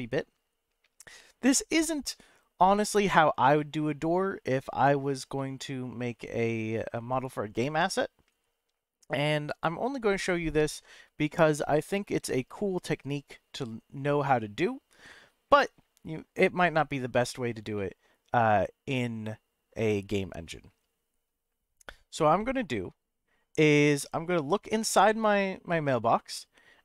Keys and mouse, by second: 5.4-8.4 middle drag, 14.3 middle click, 17.7-21.2 middle drag, 22.4 shift+middle click, 25.2 middle click.